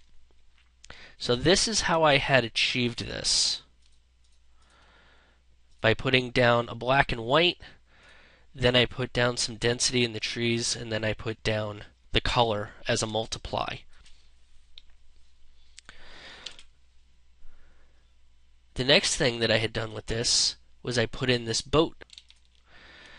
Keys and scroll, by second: 12.5 space, 16.3 ctrl+0.